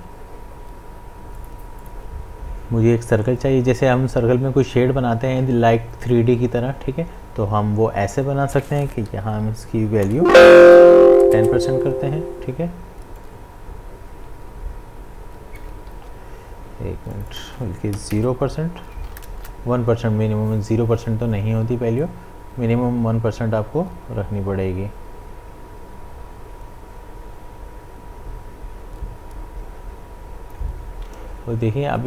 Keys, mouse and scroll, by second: 1.4 click, 10.1 =, 13.1-15.9 drag, 15.9 ctrl+z, 17.1 click, 19.3 Return, 22.0-32.0 drag.